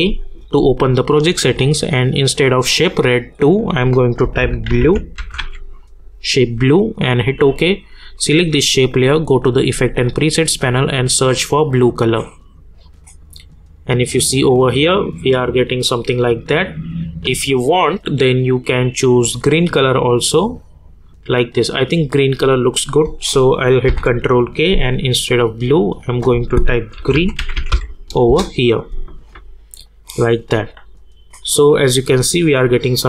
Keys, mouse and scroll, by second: 2.7-4.7 drag, 4.4-5.9 typing, 7.0 click, 16.1 click, 23.8 ctrl+k, 25.7 click, 26.7-28.2 typing, 28.2 Return, 30.0 click.